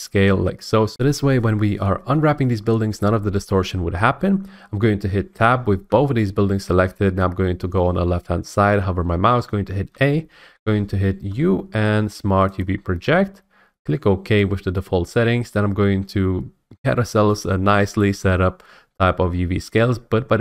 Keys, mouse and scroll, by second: 0.0-0.9 drag, 5.9 Tab, 9.9 a, 11.3 u, 12.6 click, 14.4 click.